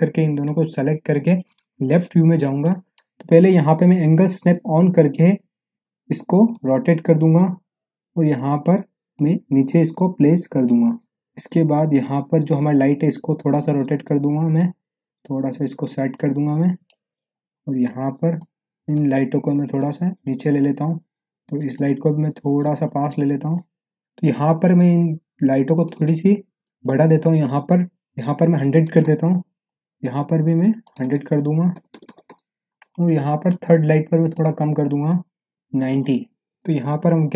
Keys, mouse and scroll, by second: 1.7 l, 2.6-3.0 middle click, 3.0 click, 3.0 ctrl+z, 5.8 a, 6.5-8.0 drag, 8.2 w, 9.1-9.8 drag, 11.1 middle click, 12.0 click, 13.4 e, 14.5-15.0 click, 15.0 w, 15.8-17.1 drag, 21.2 scroll up 1, 21.7 click, 25.7 click, 29.7 click, 34.2 click, 36.5 click.